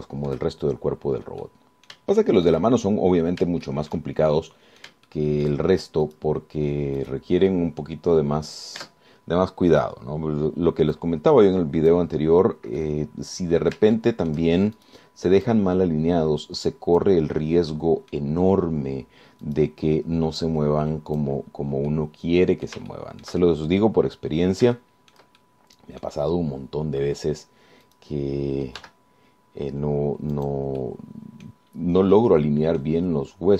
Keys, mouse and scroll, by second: 0.8-1.2 scroll up 3, 1.2 shift+click, 1.8-2.2 shift+scroll up 3, 2.6 click, 3.4 shift+click, 4.8 shift+click, 5.5 shift+click, 6.5 shift+click, 7.2 click, 8.2 click, 10.0 Tab, 11.0 click, 12.2-13.3 drag, 14.0-15.1 drag, 15.2 shift+click, 16.0 shift+click, 16.1 shift+right click, 16.7-18.4 drag, 19.0 middle click, 20.6 right click, 21.6 click, 23.1 click, 24.2-25.2 shift+drag, 25.5-25.8 scroll up 4, 26.0 shift+click, 26.6 shift+click, 27.8-28.1 scroll down 1, 29.1 click, 30.0 g, 31.6 click, 32.0 click, 32.8 scroll down 1, 33.4 click.